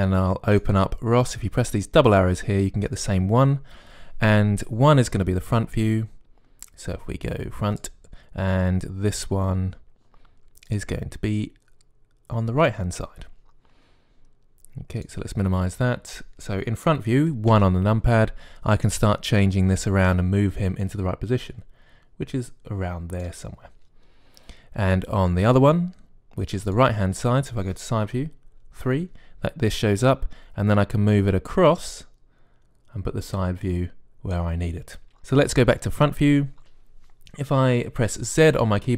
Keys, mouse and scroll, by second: 5.9-13.4 drag, 15.8-18.3 drag, 18.3 KP_1, 20.9-22.8 drag, 26.3-29.5 drag, 28.9 KP_3, 32.6-34.4 drag, 36.8 KP_1.